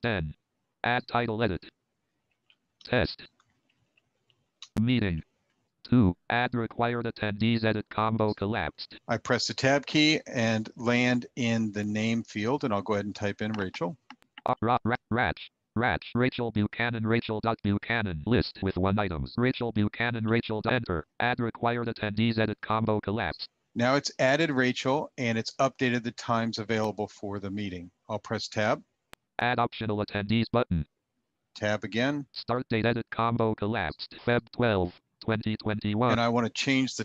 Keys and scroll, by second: 9.0 Tab, 27.6 Tab, 31.4 Tab, 34.2 Tab.